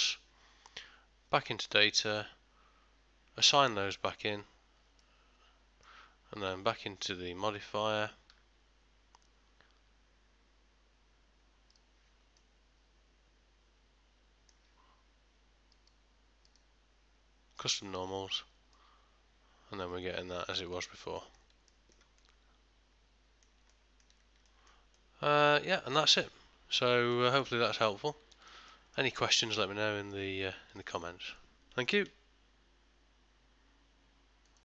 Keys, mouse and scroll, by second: 2.1 click, 4.4 Tab, 5.1 middle click, 7.6 click, 11.8 click, 12.4 middle click, 15.9 click, 18.8 middle click, 21.2 ctrl+middle click, 21.8 shift+middle click, 22.3 middle click, 23.8 ctrl+middle click, 24.5 shift+middle click, 25.0 middle click, 27.2 ctrl+middle click, 27.9 middle click, 28.4 ctrl+middle click, 28.8 shift+middle click, 29.6 middle click, 30.8 shift+middle click.